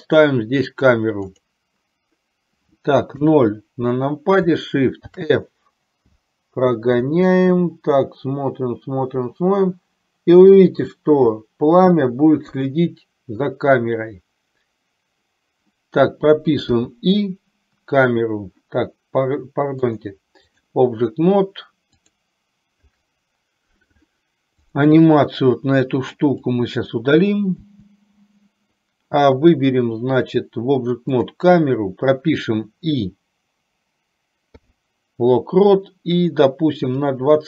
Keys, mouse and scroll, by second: 3.3 KP_0, 5.3 shift+f, 16.9 i, 19.9 click, 22.1 click, 24.8 click, 26.6 click, 27.8 Delete, 34.8 i, 37.3 click.